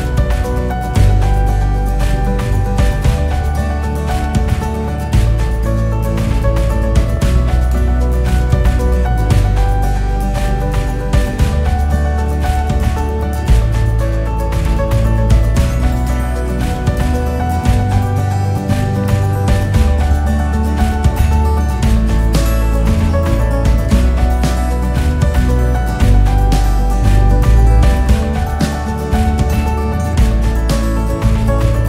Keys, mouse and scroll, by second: 1.6 click, 1.9-2.5 scroll up 4, 2.5-3.3 scroll down 1, 3.3 scroll down 1, 3.5 Tab, 3.9 click, 4.5 h, 4.9 click, 6.0 click, 6.6 KP_2, 7.2 KP_1, 7.6-8.3 scroll up 1, 8.3-8.8 ctrl+KP_8, 9.0-9.4 scroll up 7, 10.4 click, 11.4 click, 12.6 alt+click, 12.9-13.9 scroll down 3, 13.9 e, 15.3 s, 17.0 e, 18.5 s, 20.9 alt+click, 21.7 s, 24.4 click, 25.9 s, 27.5 click, 28.7 e, 31.0 alt+click.